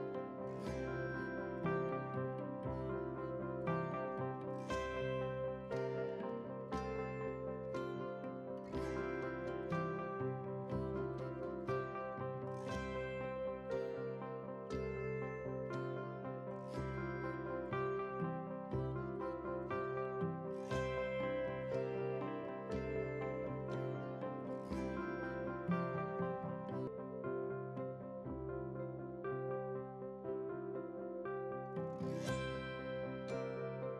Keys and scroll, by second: 0.6 ctrl+a, 1.5 ctrl+v, 2.0 ctrl+space, 21.4 shift+F11.